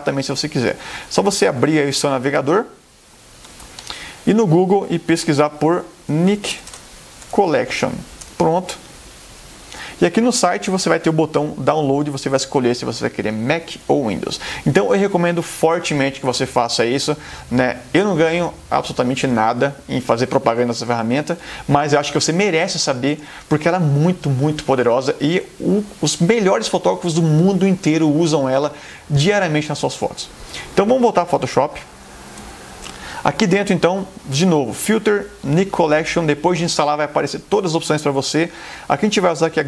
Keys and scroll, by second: 2.6 super+Tab, 6.0-7.6 typing, 8.3 Return, 31.4 super+Tab.